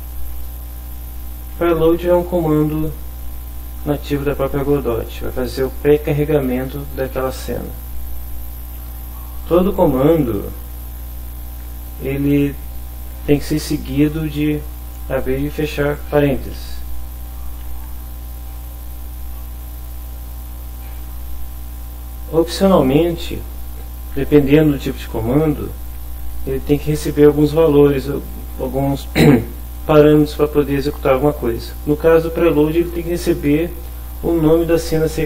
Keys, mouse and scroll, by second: 9.2 Right, 10.1 Up, 10.7 Down, 15.6 Right, 16.6 Right, 17.1 Left, 17.7 Down, 18.3 Right, 19.1 Left, 19.5 Up, 21.3 Down, 21.6 Right.